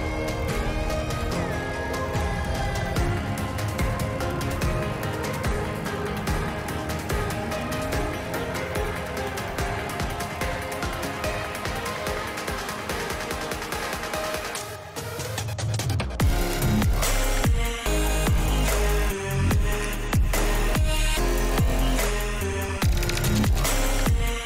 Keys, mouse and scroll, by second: 1.4 click, 4.4 click, 5.5 click, 9.2-10.3 drag, 11.1 shift+middle click, 11.6 shift+middle click, 14.2-16.2 drag, 16.3-17.5 drag, 18.5 shift+middle click, 23.8 Tab.